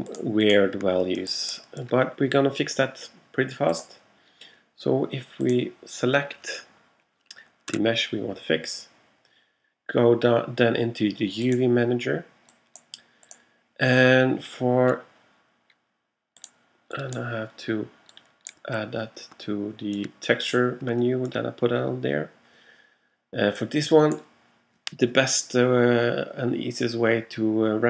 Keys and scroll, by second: 8.8 super+a.